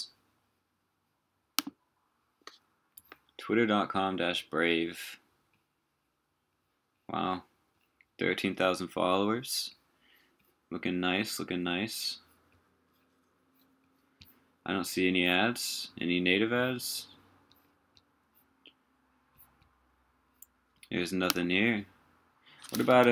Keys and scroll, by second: 23.0 super+t.